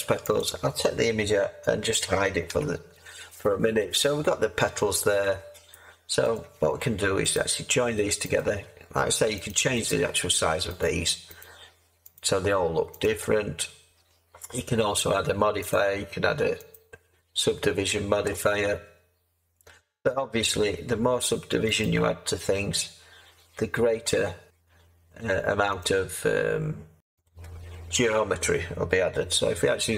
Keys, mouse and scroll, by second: 2.5 h, 29.4 Tab.